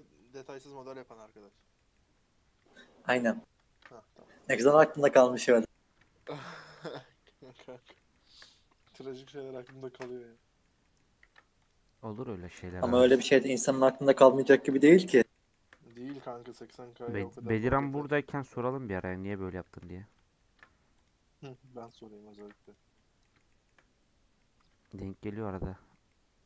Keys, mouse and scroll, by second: 0.6 Tab, 1.0 middle click, 1.5 scroll down 3, 1.7 middle click, 1.9-2.6 scroll up 6, 2.7 Tab, 3.7 ctrl+r, 5.4-6.5 middle drag, 6.5 ctrl+r, 7.7-9.5 middle drag, 9.5 ctrl+r, 10.3 middle click, 11.2 ctrl+r, 12.2 shift+middle click, 12.9 ctrl+r, 13.6 middle click, 14.5 ctrl+r, 15.3 shift+middle click, 15.9 ctrl+r, 16.9 middle click, 17.6 ctrl+r, 18.6-20.4 shift+middle drag, 20.4 ctrl+r, 21.7 middle click, 22.3 ctrl+r, 23.2 shift+middle click, 24.0-24.3 scroll down 4, 24.3 middle click, 25.0 scroll down 2, 25.2-25.9 middle drag, 25.9 scroll down 1, 26.0-26.4 middle drag.